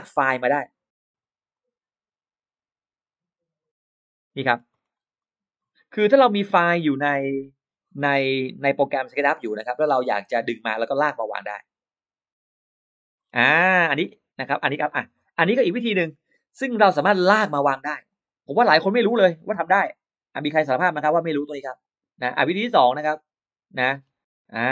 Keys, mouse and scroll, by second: 1.4-2.9 drag, 4.3 middle click, 4.6 middle click, 5.0 middle click, 9.8 click, 10.5-12.0 drag, 13.0 scroll down 1, 13.7 middle click, 14.2-14.5 scroll up 1, 17.9 click, 18.1 click, 20.3 click, 21.6 click, 22.2 click, 23.3-23.6 scroll up 1, 23.8-24.1 scroll down 1.